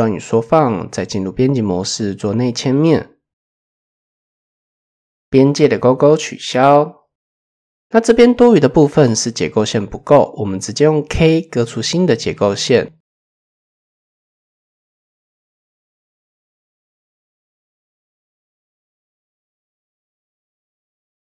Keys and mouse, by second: 0.0 Tab, 5.7 click, 6.1 middle click, 6.5 shift+middle click, 6.8 middle click, 8.1 shift+middle click, 14.4 k, 17.4 typing, 18.9 click, 20.4 middle click.